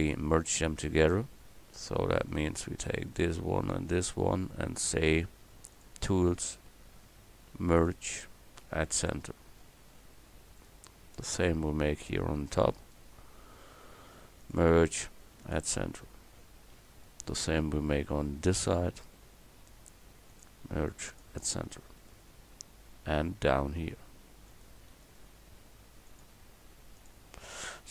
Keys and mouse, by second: 7.8-9.6 right drag, 9.6-10.6 middle drag, 17.1 click, 21.7 middle click, 27.5 click.